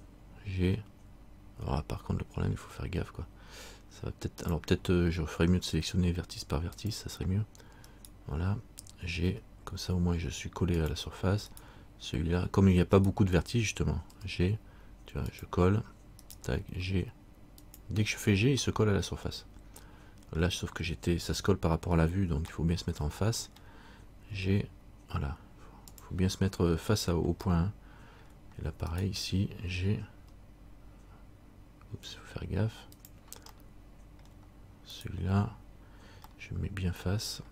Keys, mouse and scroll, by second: 0.9 g, 6.9 click, 8.1 right click, 9.4 g, 11.7 right click, 14.3 g, 16.4 right click, 16.8 g, 19.0 middle click, 22.7 middle click, 24.5 g, 27.7 middle click, 29.1 right click, 30.3 g, 33.7 middle click, 35.1 right click, 36.5 middle click.